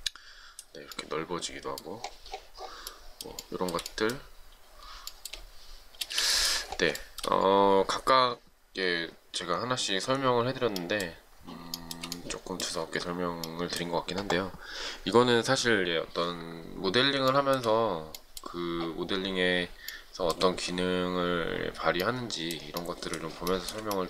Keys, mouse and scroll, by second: 3.7 shift+middle click, 5.3 shift+middle click, 6.3 space, 7.3 shift+middle click, 12.1 shift+middle click, 17.6 shift+middle click, 20.2 shift+middle click, 23.8 shift+middle click.